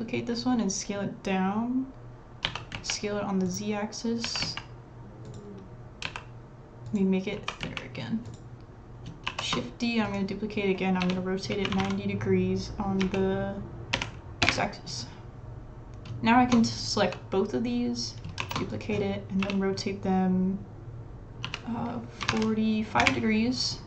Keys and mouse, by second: 2.4 s, 4.4 s, 6.0 s, 7.3 s, 9.3 shift+d, 11.0 r, 17.0 l, 18.4 shift+d, 19.4 r, 21.4 s, 22.2-23.8 drag.